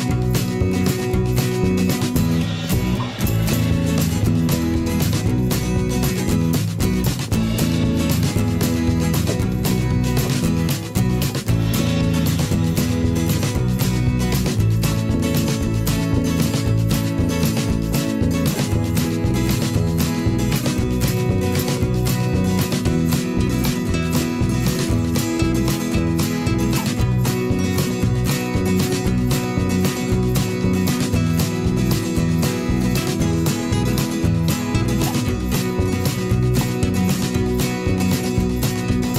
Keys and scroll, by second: 0.1 ctrl+z, 0.7 ctrl+z, 2.7 ctrl+d, 8.2 ctrl+z, 9.7 l, 10.8 v, 17.3 3, 17.4 Return, 18.1 ctrl+a, 18.3 5, 18.4 Return, 18.9 ctrl+shift+[, 19.0 ctrl+], 19.7 ctrl+[, 19.9 ctrl+], 20.8 ctrl+], 21.6 ctrl+shift+[, 22.6 ctrl+shift+[, 22.8 ctrl+], 23.3 ctrl+[, 23.7 ctrl+], 29.9 ctrl+shift+[, 30.0 ctrl+], 31.7 ctrl+z, 35.0 ctrl+shift+], 35.7 ctrl+[, 36.0 ctrl+shift+], 37.4 ctrl+[, 37.6 ctrl+], 38.2 ctrl+[.